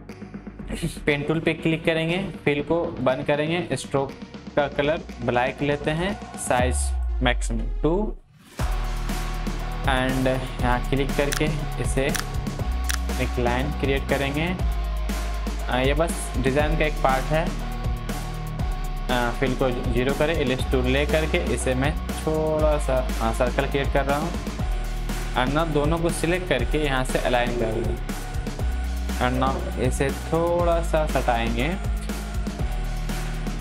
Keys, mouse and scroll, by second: 1.2-17.0 drag, 21.5-29.5 shift+drag, 29.5 Left, 31.3 click.